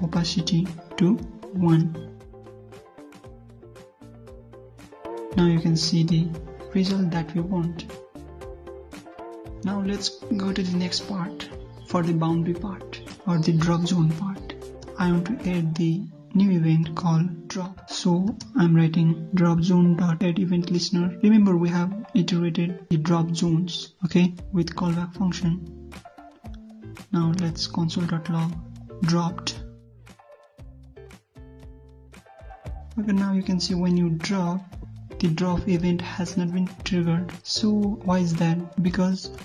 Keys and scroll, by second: 5.7 ctrl+F5, 10.6 alt+Tab, 31.5 ctrl+s, 32.1 alt+Tab, 32.4 ctrl+F5, 37.2 alt+Tab.